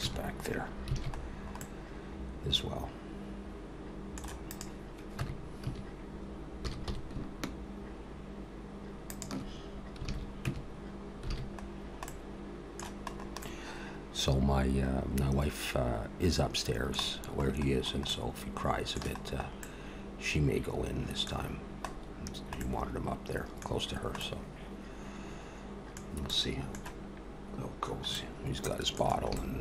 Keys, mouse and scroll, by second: 0.0 Tab, 0.9 alt+a, 1.2-1.6 scroll down 5, 1.6 middle click, 4.5 click, 5.2 Tab, 5.6 a, 6.6 s, 10.5 alt+a, 10.5 Tab, 11.3 alt+a, 11.7-12.1 scroll down 2, 12.1 middle click, 13.1 scroll up 1, 13.4 middle click, 17.2-18.1 scroll up 4, 18.1 middle click, 19.2-19.6 scroll up 2, 19.6 middle click, 21.4-22.0 scroll down 2, 22.0-22.4 scroll down 2, 22.6 middle click, 23.7-24.8 scroll down 3, 24.2 middle click, 26.2 scroll up 1, 26.3 middle click, 28.1 middle click, 29.4 shift+middle click.